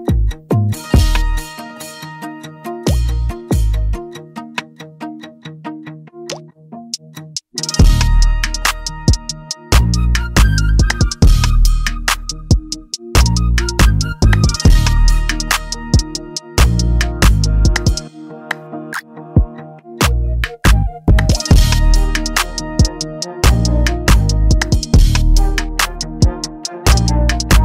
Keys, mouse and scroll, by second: 1.2 click, 2.4 click, 5.7 click, 11.6 click, 16.1 click, 18.7 click, 20.2 click, 22.7 click, 24.1 click, 24.9 click, 25.6 click, 25.8 click, 26.1 click, 26.5 click, 27.1 click.